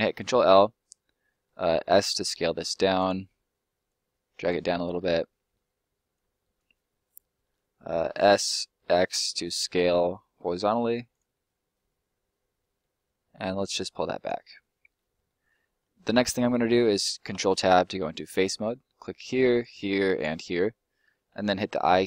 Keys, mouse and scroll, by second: 1.1 middle click, 1.7 s, 2.9 click, 4.7 middle click, 6.1 click, 6.7 middle click, 8.0 s, 8.9 x, 11.1 click, 11.3 middle click, 13.6 click, 14.5 middle click, 16.0 scroll up 1, 16.1 middle click, 18.2 click, 18.9 right click, 19.2 shift+right click.